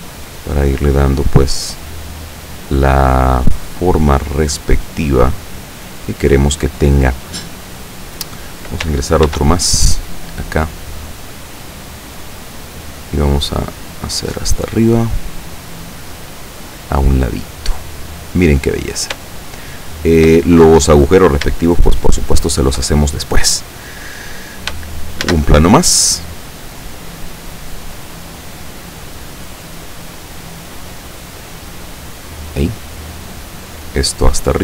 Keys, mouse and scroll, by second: 1.4 right click, 1.9-4.1 drag, 4.5-6.1 drag, 9.3 ctrl+r, 9.9 ctrl+click, 11.9 click, 12.7 click, 12.7 right click, 13.3-15.8 drag, 16.2-18.2 drag, 19.5 shift+middle click, 21.7-22.9 shift+middle drag, 25.4 shift+a, 26.0 click, 27.1-29.8 drag, 30.6-32.7 drag, 33.3 right click, 33.9-34.6 drag.